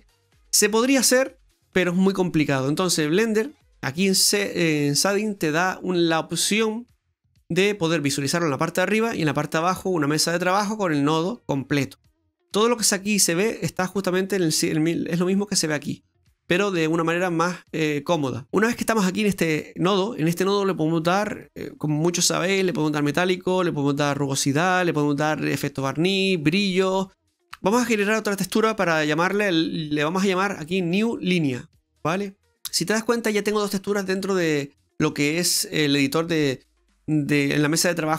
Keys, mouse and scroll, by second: 5.0 click, 7.3 middle click, 7.9-8.8 scroll down 2, 15.4 click, 18.6 scroll up 1, 20.7 middle click, 28.7 click, 30.9 click, 32.0 click, 32.2 click, 35.0 middle click.